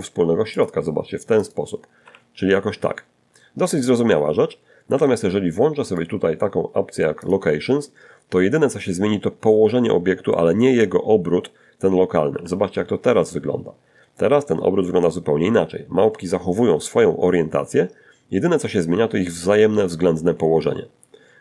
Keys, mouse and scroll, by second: 0.2 r, 3.1 Escape, 4.1 click, 5.4 click, 10.6 r, 19.6 Escape, 20.5 click.